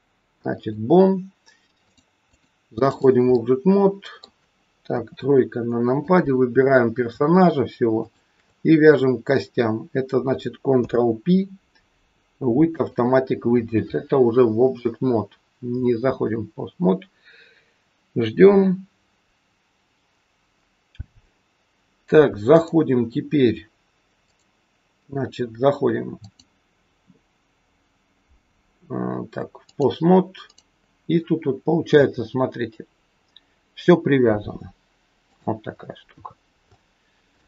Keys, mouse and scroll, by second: 1.8 click, 2.2 click, 3.3 middle click, 4.8 KP_3, 5.3 scroll down 2, 5.9 click, 5.9-6.3 scroll down 1, 7.9 shift+click, 10.7 ctrl+p, 20.8-21.2 scroll up 1, 21.2-22.4 scroll down 2, 22.4 click, 24.2 click, 30.4 click, 31.9 r, 35.7-36.3 scroll up 2, 36.3 scroll up 2, 36.7 shift+middle click.